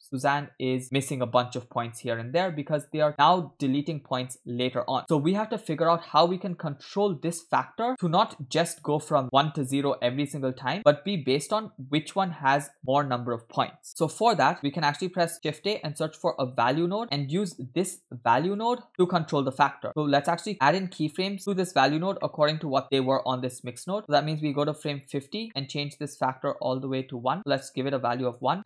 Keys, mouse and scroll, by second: 2.2-4.3 middle drag, 5.0-5.4 scroll down 4, 5.4 middle click, 6.3 middle click, 6.5-7.2 scroll up 2, 7.2 click, 7.9-8.4 drag, 8.7 middle click, 8.9-9.2 scroll up 2, 10.1-11.0 drag, 13.9 middle click, 13.9 scroll down 3, 14.3 middle click, 14.6-15.2 scroll down 2, 16.4 shift+a, 18.9 middle click, 18.9-19.8 scroll up 1, 19.9 middle click, 19.9-20.5 scroll up 2, 20.9 middle click, 21.4 click, 22.2 middle click, 22.8 click, 24.2 click, 25.5 middle click, 27.0-28.5 drag.